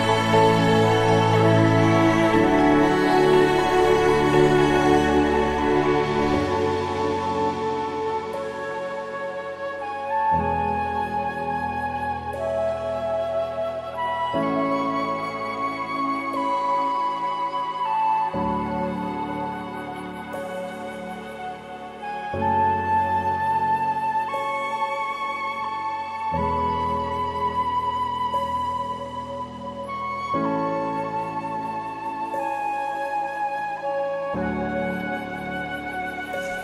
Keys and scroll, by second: 7.5 ctrl+-, 7.7 ctrl+=, 7.9 ctrl+-, 8.2 ctrl+0.